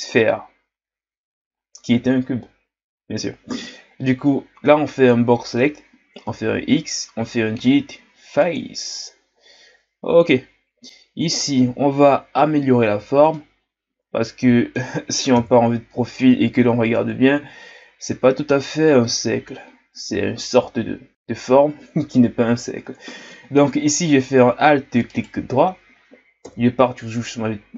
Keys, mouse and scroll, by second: 6.2 x, 11.1-12.3 scroll up 4, 12.3-13.0 scroll down 1, 13.0 z, 13.3-15.3 middle drag, 15.3 KP_3, 16.8-17.5 ctrl+scroll down 2, 17.5 scroll up 1, 23.9-25.1 middle drag, 25.1-26.4 alt+right drag, 26.4 KP_3.